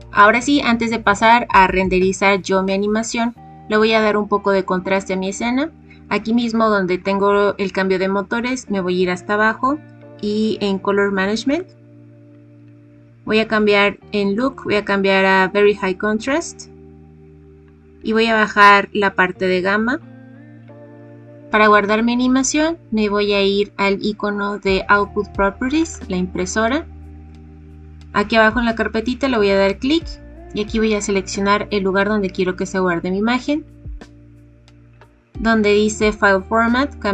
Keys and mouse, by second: 11.5 click, 14.3-17.3 drag, 17.3-21.0 drag, 25.8 click, 29.5 click, 36.9-37.1 drag.